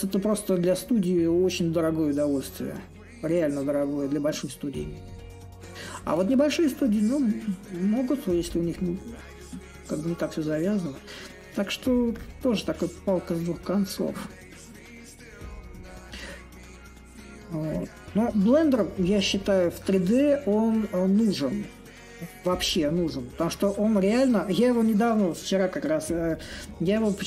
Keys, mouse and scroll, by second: 5.1-10.1 drag, 10.4-15.4 drag, 16.8-21.9 drag, 22.2-27.2 drag.